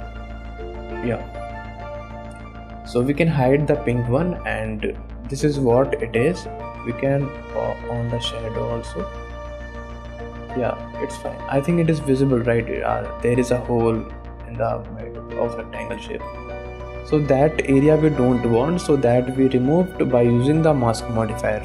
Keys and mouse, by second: 1.5 click, 1.8 shift+click, 2.2 middle click, 4.0 click, 4.4 middle click, 5.0-6.0 middle drag, 7.2-8.8 drag, 8.9 middle click, 10.4-11.5 drag, 11.5 middle drag, 12.5 middle click, 14.9 shift+middle click, 15.4 middle click, 17.2 middle click, 17.8 middle click, 18.3 shift+middle click, 19.8 click, 20.3 middle click, 20.8 shift+middle click, 21.0-21.6 middle drag.